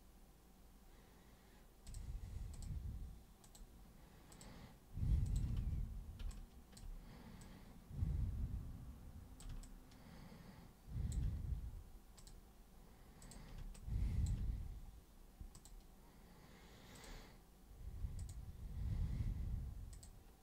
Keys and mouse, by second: 1.8 super+click, 2.5 super+click, 3.4 super+click, 4.3 super+click, 5.2 super+click, 5.5 super+w, 6.3 alt+super+click, 7.4 super+click, 9.6-11.1 alt+super+drag, 12.1 super+click, 13.2 super+click, 13.7 alt+super+click, 15.5 super+click, 16.9 super+click, 18.2 super+click, 19.9 super+click.